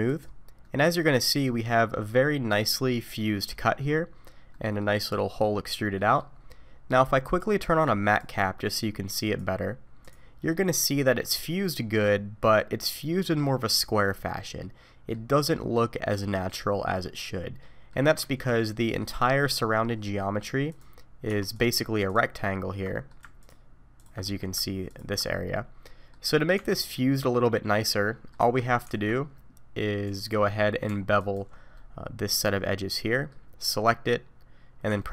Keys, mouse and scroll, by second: 0.6 middle click, 3.9-4.5 scroll up 1, 4.5 middle click, 4.5 scroll up 2, 6.0 middle click, 7.2 click, 10.5 middle click, 17.3 middle click, 18.2 Tab, 18.6 middle click, 20.7 click, 21.3 2, 21.5 click, 22.1 ctrl+click, 22.9 middle click, 23.4 ctrl+click, 24.0 ctrl+click, 24.2 middle click, 24.9 ctrl+click, 25.3 middle click, 26.6 Tab, 26.8 middle click, 28.4 Tab, 28.9 alt+a, 30.0 click, 30.4 middle click, 31.2 alt+click, 31.7 middle click, 33.7 middle click.